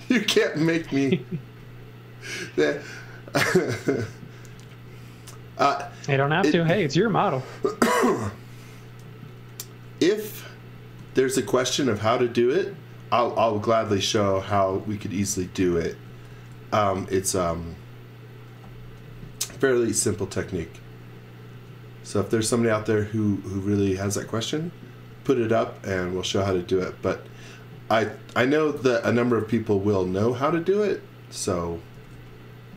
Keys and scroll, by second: 0.5 z, 1.5 x, 4.6 x, 10.8 x, 11.3 v, 15.7-17.3 typing, 18.7-20.4 typing, 21.5 space, 22.2 x, 22.5 v, 25.1 m, 31.7-32.7 typing.